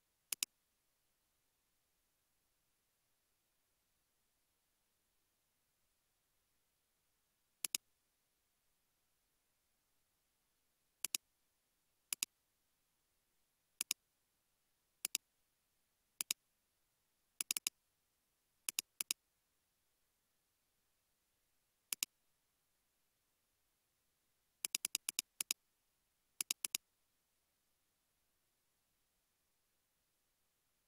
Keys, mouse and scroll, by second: 9.4 space, 9.8 space, 17.6 double click, 19.6 space, 20.9 space, 22.8 ctrl+c, 24.9 double click, 27.7 ctrl+v, 30.6 ctrl+z.